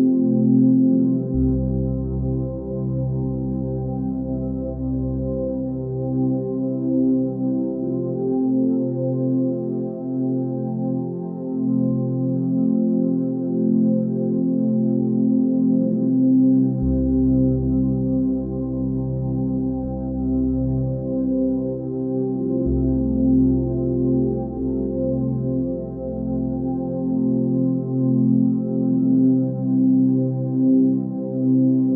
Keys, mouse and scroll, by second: 1.7 ctrl+z, 1.9 x, 3.2 ctrl+z, 18.6 ctrl+space, 26.0 ctrl+space.